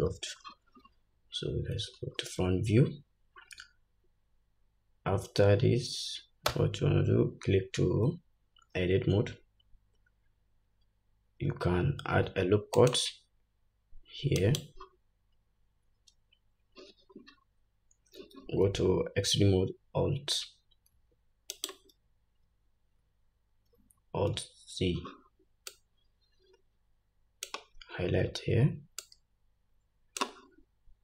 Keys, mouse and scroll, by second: 0.2-0.5 scroll up 1, 2.3-4.1 scroll up 2, 6.6 Tab, 12.1 ctrl+r, 21.0 alt+s, 24.4 alt+z.